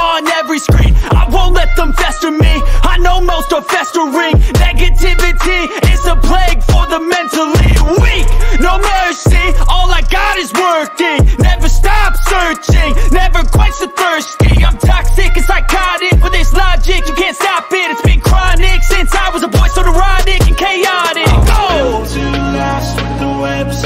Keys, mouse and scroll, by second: 10.7 click, 11.2 click, 12.3 click, 13.1 click, 14.6 click, 17.2 click, 18.2 click, 22.6 click.